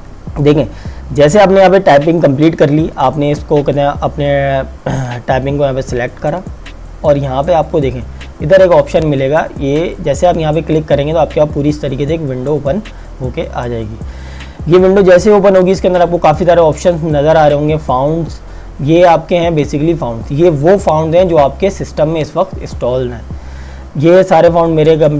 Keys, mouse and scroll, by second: 1.3 click, 10.2 click, 22.2-23.5 scroll down 1, 23.5-24.3 scroll up 1, 24.7-25.1 scroll down 1.